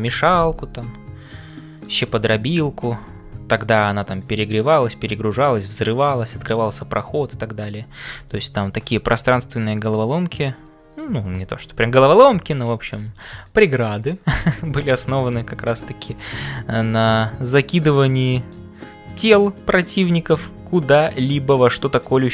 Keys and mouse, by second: 0.0-22.3 typing, 0.1-2.0 middle drag, 4.2-7.9 middle drag, 10.4 middle click, 13.0 shift+middle click, 13.4 middle click, 15.2 click, 15.7 middle click, 17.7 middle click, 19.6 middle click, 21.5 middle click.